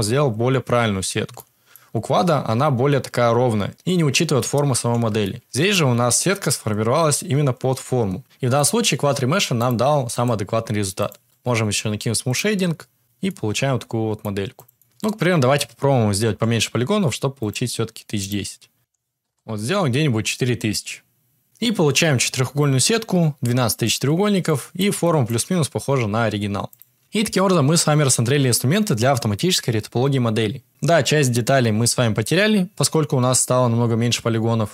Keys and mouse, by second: 1.3-1.7 shift+middle drag, 5.4-5.7 shift+middle drag, 8.2 Tab, 9.3 click, 9.8-10.8 right drag, 12.3-13.6 right drag, 13.7 middle click, 14.7 Tab, 16.2 h, 17.3 click, 18.8 click, 18.8 0, 24.0 Tab, 24.4 middle click, 25.0 shift+middle drag, 26.6 click, 26.9 Tab.